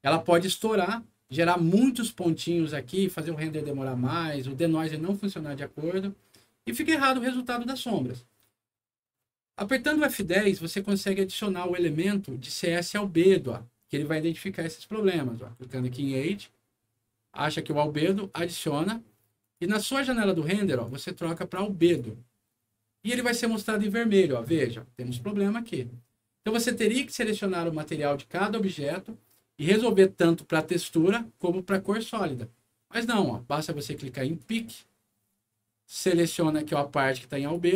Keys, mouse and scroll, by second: 9.6 middle click, 10.1 F10, 12.6 click, 15.7 click, 17.5 click, 18.2 click, 19.3 click, 20.8 click, 21.7 click, 34.3 click, 37.3 click.